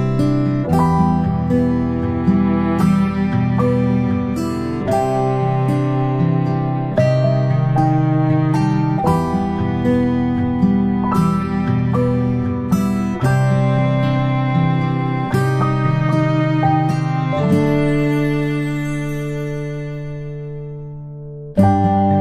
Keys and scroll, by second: 12.1 ctrl+a, 13.3 Delete, 14.3 Delete, 16.5 Delete, 17.2 Delete.